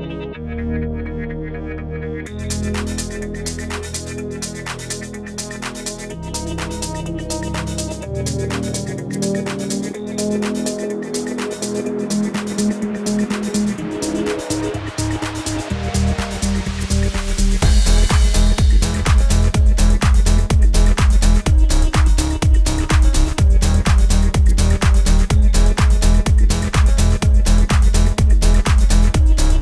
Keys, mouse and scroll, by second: 0.3 click, 2.4-2.8 alt+scroll down 1, 5.8 scroll down 1, 7.2-15.1 drag, 16.8 scroll up 1, 19.4 click, 23.3-29.6 drag.